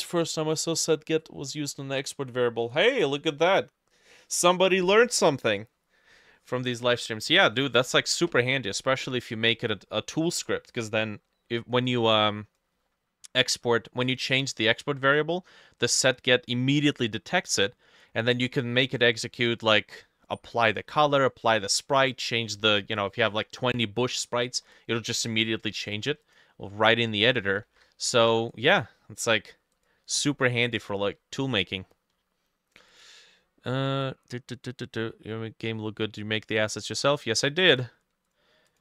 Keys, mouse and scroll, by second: 14.6 double click, 27.7 ctrl+s, 33.5-35.5 scroll down 1, 38.7 double click.